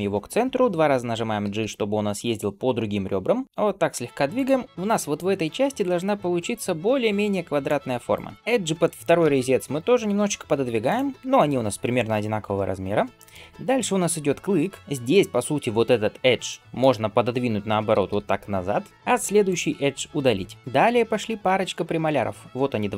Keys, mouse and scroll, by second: 1.2 g, 4.6 middle click, 4.6 scroll up 1, 4.7 d, 5.0-7.5 drag, 7.5-8.0 d, 8.0 right click, 13.0 shift+middle click, 16.3-17.7 middle drag, 17.7 g, 19.3 alt+click, 20.5 shift+middle click.